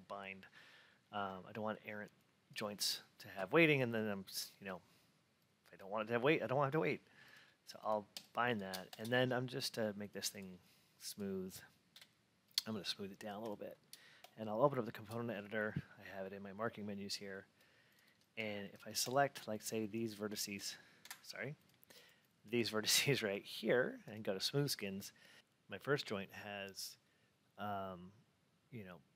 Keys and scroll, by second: 20.9 F8.